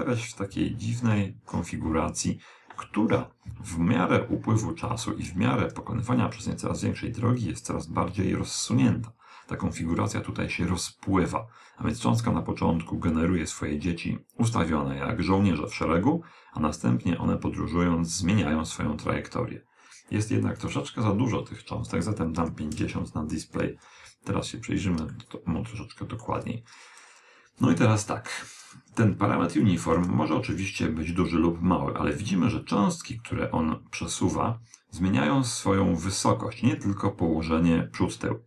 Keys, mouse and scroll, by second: 5.6-6.0 scroll up 1, 6.0-7.6 middle drag, 19.0 click, 22.3 middle click, 22.5-23.0 scroll up 1, 23.0-24.8 middle drag, 27.5 click.